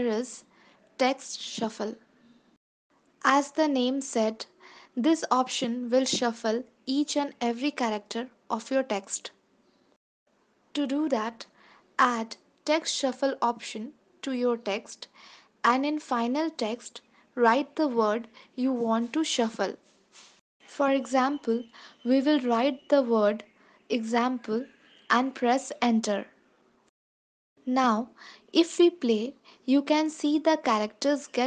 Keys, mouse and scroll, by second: 2.4 click, 11.8 ctrl+s, 16.9 click, 25.9 ctrl+s, 30.6 space.